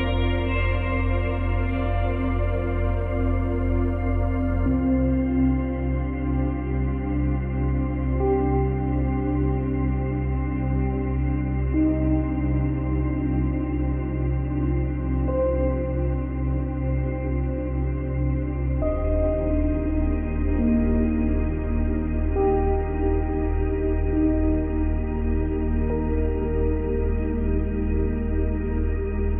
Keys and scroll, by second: 25.5 ctrl+z, 28.9 ctrl+z.